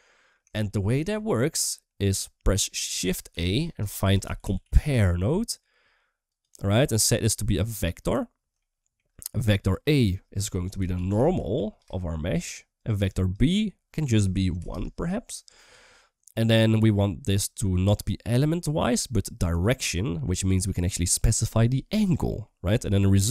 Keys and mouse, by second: 0.4 shift+middle drag, 3.1 shift+a, 6.9-7.9 drag, 8.4-8.8 shift+middle drag, 9.5-12.7 drag, 12.8 click, 13.7 click, 17.5-19.4 drag, 22.2-23.3 middle drag.